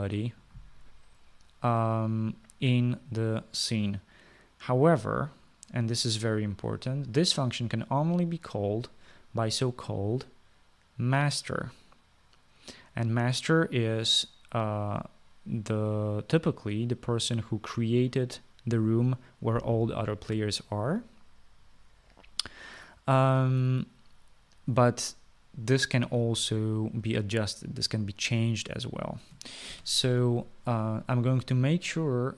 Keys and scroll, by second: 31.0 ctrl+s.